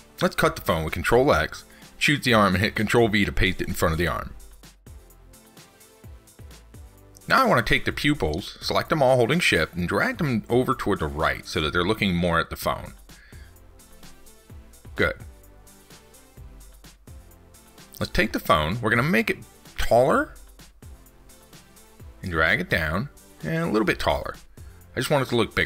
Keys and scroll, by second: 0.8 ctrl+x, 1.5 ctrl+v, 14.1 ctrl+s.